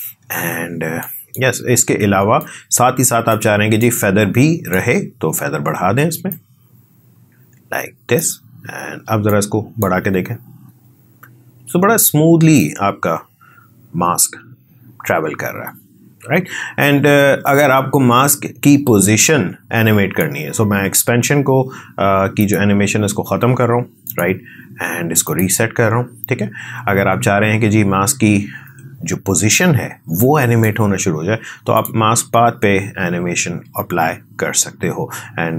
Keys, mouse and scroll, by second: 1.0-9.9 drag, 11.8 space, 12.6-22.4 drag, 34.1 click.